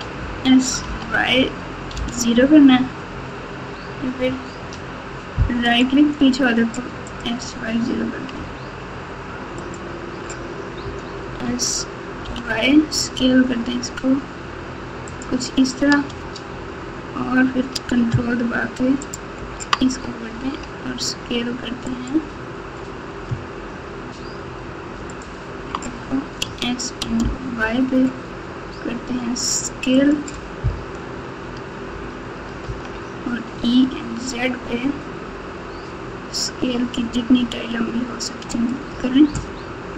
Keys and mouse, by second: 7.0 click, 9.5 ctrl+click, 11.2 s, 19.0 ctrl+click, 23.2 ctrl+s, 25.1 ctrl+click, 26.4 s, 31.0 KP_1, 32.6 e.